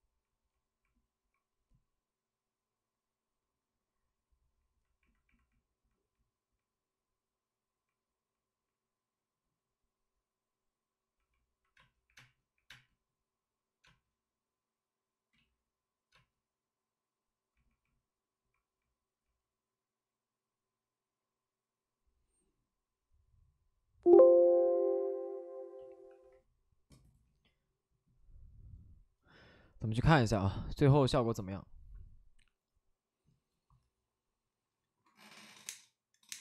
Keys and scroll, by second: 3.7 space, 11.7-12.6 typing, 15.3 ctrl+z, 16.0 space, 18.4 space, 26.0 shift+r.